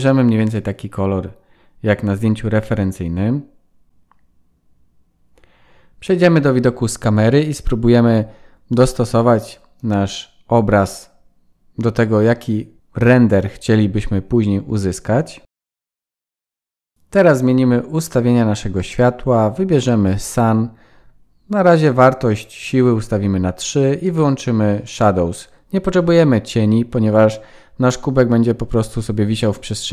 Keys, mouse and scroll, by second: 1.4 click, 3.4 click, 4.0 KP_0, 6.2 click, 7.8 click, 8.8 click, 10.1-13.4 scroll up 16, 12.2 middle click, 15.4-16.0 scroll down 10, 16.0 click, 17.2 click, 17.9 click, 21.9 click, 22.4-23.3 scroll down 1, 23.4 scroll down 4, 23.4 shift+middle click, 26.9 middle click, 29.7 KP_1.